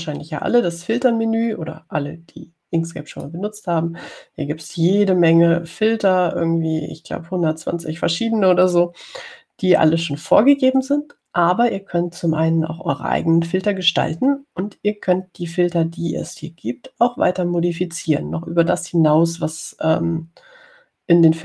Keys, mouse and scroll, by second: 0.6 click, 4.4 click, 9.9 click.